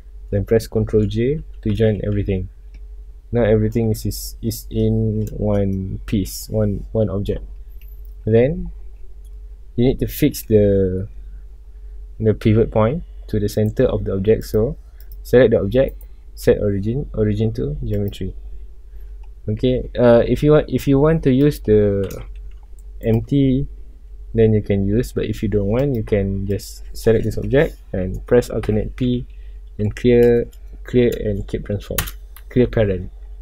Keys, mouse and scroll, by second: 1.7 ctrl+j, 2.5 scroll down 1, 2.6-7.9 middle drag, 7.9 scroll up 1, 8.2 scroll down 1, 8.6-9.1 middle drag, 9.1 scroll up 1, 9.3 scroll down 1, 9.5-10.2 middle drag, 10.2 scroll down 1, 11.0 scroll up 1, 13.5 right click, 14.4 drag, 15.0 click, 15.8-19.8 right drag, 20.2 scroll down 1, 20.2-21.4 middle drag, 21.4 click, 22.5 g, 23.1 right click, 25.7 click, 26.5 click, 28.6 alt+p, 32.4 Return.